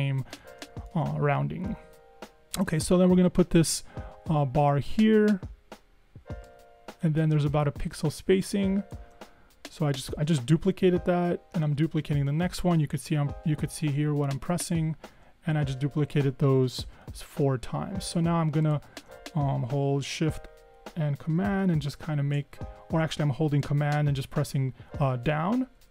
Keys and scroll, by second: 0.8 super+-, 1.0 super+-, 11.8 super+d, 15.3 super+d, 22.7 super+Down, 24.1 super+Down, 25.3 super+Down, 25.8 super+Down.